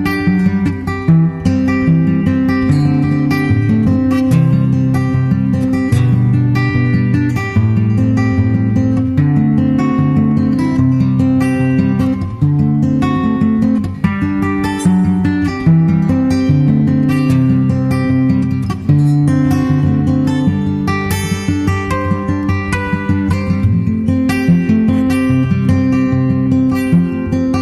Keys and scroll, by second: 1.5 super+Tab, 1.7 super+Tab, 2.1 super+Tab, 2.2 super+Tab, 2.4 super+Tab, 26.8 super+Tab.